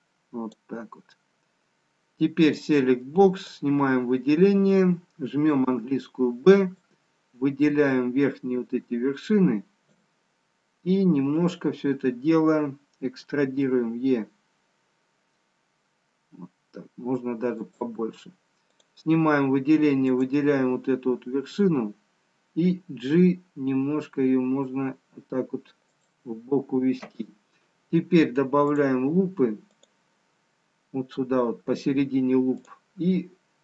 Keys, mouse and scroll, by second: 2.7 click, 5.1 click, 5.7 b, 15.1 e, 18.8 click, 20.1 click, 22.8 g, 28.9 click, 29.9 click.